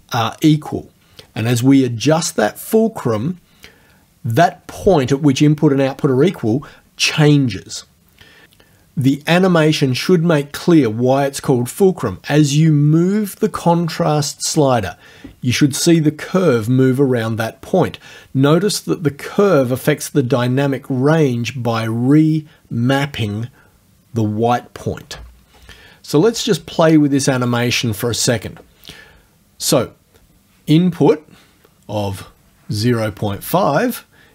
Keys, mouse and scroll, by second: 32.3 click.